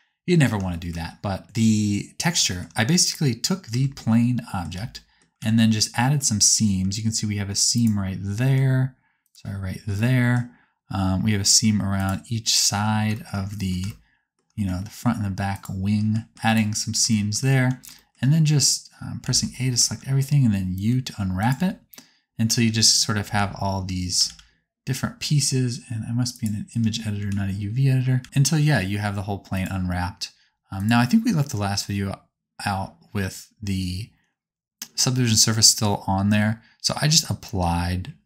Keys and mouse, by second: 3.0 click, 3.9 Tab, 4.8 a, 5.4 alt+z, 7.2-8.3 alt+drag, 8.5 alt+click, 9.3-12.0 alt+middle drag, 12.0 alt+click, 15.5 alt+click, 17.6 alt+z, 19.1 a, 19.8 alt+z, 20.8 u, 22.6 a, 23.1 a, 24.2 alt+z, 26.2-29.5 drag, 28.1 a, 28.2 s, 30.7 click.